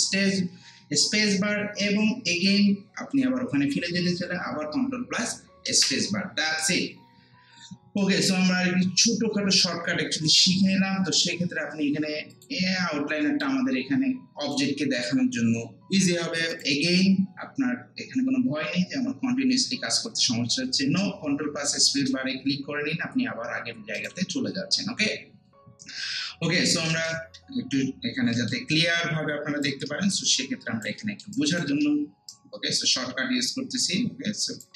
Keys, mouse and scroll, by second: 0.3 ctrl+space, 5.7 ctrl+space, 8.0-16.5 drag, 21.2 click, 21.9 ctrl+space, 24.0 click, 26.6 click, 26.9 ctrl+space, 27.5 scroll down 1, 28.2 scroll up 1, 28.3 alt+middle click, 28.7 alt+right click, 29.9 alt+middle click, 30.3 alt+right click, 31.0 alt+middle click, 31.3 alt+right click, 32.3-34.7 shift+right drag.